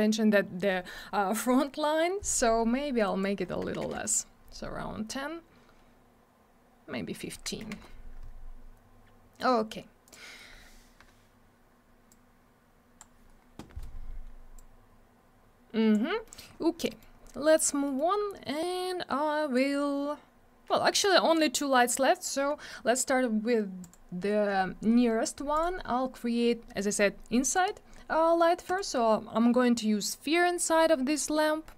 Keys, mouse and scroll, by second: 3.0 click, 3.2 click, 3.6 1, 3.9 Return, 5.4-6.1 scroll up 1, 6.6 scroll down 1, 7.3 1, 7.7 Return, 9.0-9.9 scroll down 1, 10.0 click, 12.0 click, 14.5 click, 16.2 middle click, 16.3 middle click, 16.4-16.8 scroll down 1, 16.8 middle click, 16.9 middle click, 17.1 scroll up 1, 17.8 middle click, 17.9 middle click, 18.6 click, 23.8 click, 23.9 click, 25.6 click, 25.6 click, 27.5 click, 27.6 click, 28.7 click, 28.8 click, 30.4 middle click, 30.6 middle click, 30.7 scroll down 1, 31.1 middle click, 31.3 middle click, 31.4 scroll up 1.